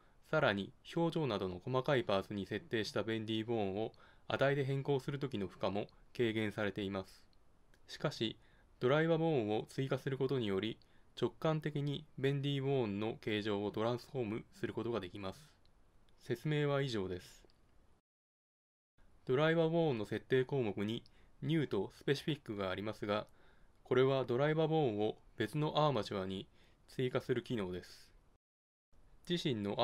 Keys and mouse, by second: 0.0 g, 2.0 g, 4.1 g, 20.6 Tab, 25.8-27.6 drag, 29.2-29.8 drag.